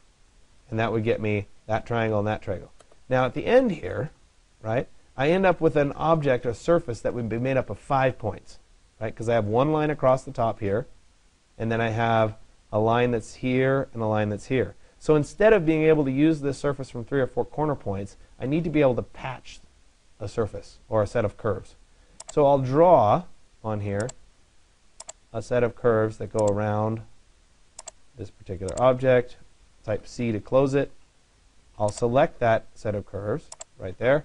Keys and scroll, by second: 30.2 Return.